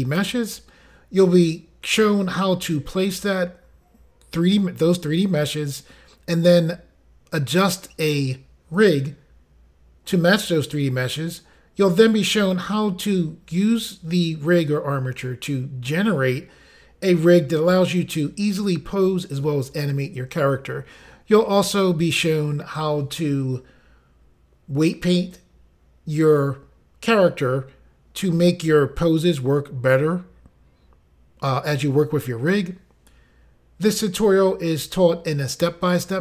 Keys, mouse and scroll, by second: 1.1 g, 5.3 click, 6.4 r, 7.8 click, 10.8 click, 12.4 click, 13.9 r, 15.4 click, 16.6 click, 17.9 r, 21.0 click, 21.9 click, 23.2 r, 27.3 right click, 28.5 click, 29.3 r, 31.1 right click, 33.0 click, 34.1 r, 35.1 right click, 36.1 click.